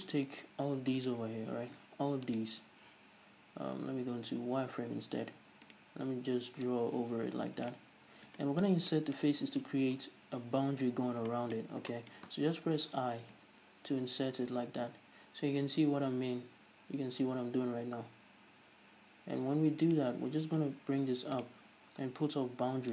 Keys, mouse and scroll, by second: 1.1 right click, 2.4-4.8 ctrl+shift+right drag, 4.8 z, 5.7-6.8 right drag, 6.8 drag, 8.1-8.5 scroll up 2, 8.5-20.1 shift+middle drag, 20.1 shift+click, 21.5 click.